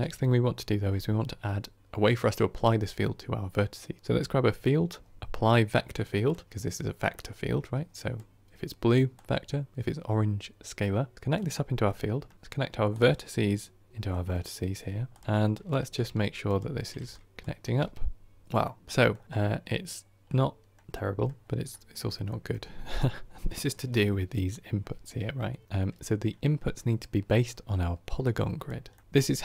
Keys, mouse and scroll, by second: 17.2 ctrl+click, 18.4 scroll down 3, 18.6-19.1 middle drag, 19.1 scroll down 1, 19.2-19.9 scroll up 8, 20.2-29.4 middle drag.